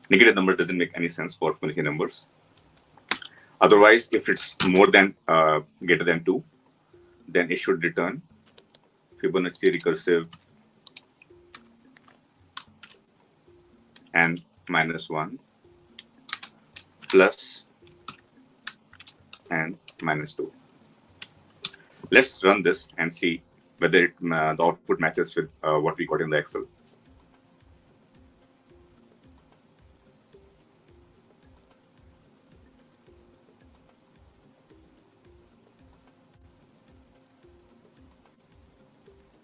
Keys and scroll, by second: 10.2 ctrl+c, 18.0 ctrl+v, 24.4 ctrl+shift+F10.